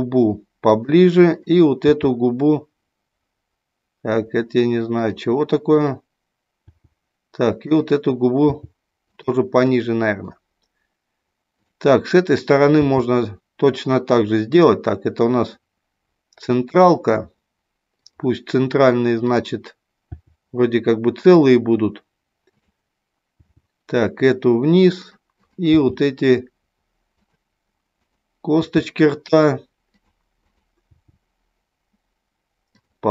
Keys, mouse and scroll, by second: 0.8 click, 1.9 g, 4.9 click, 5.6 click, 6.6 g, 7.6 click, 8.5 g, 9.8 middle click, 11.5 click, 12.8 g, 19.1 click, 20.0 g, 23.3 g, 25.4 click, 25.9 g, 27.3 click, 28.0 click, 28.5 g, 30.0 click, 30.4 click, 31.0 g, 32.7 click.